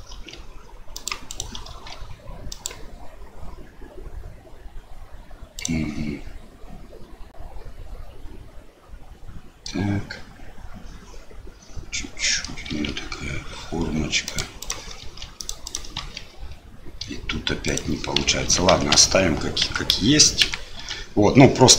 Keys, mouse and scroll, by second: 0.1 ctrl+r, 1.7 ctrl+r, 12.7 ctrl+r, 15.0 ctrl+r, 15.9 ctrl+r, 18.4 ctrl+z, 18.7 ctrl+z, 18.9 ctrl+z, 19.6 ctrl+z, 20.4 ctrl+z.